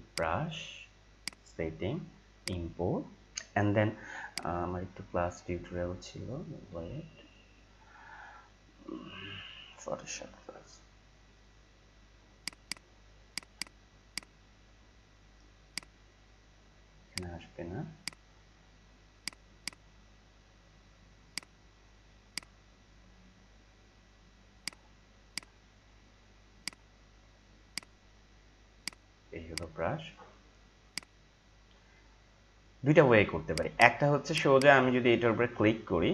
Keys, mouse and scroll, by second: 4.9 c, 6.2 c, 6.7 c, 8.9 c, 12.4 click, 24.6 click, 28.8 right click, 30.1 click, 33.4 click.